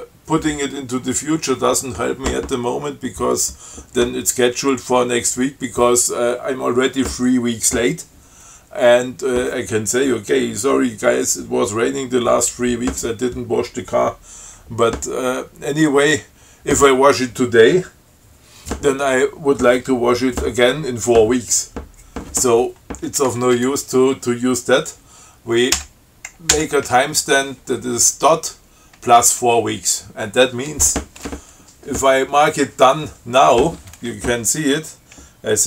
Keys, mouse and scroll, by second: 23.3 Right, 26.0 ., 26.8 Delete.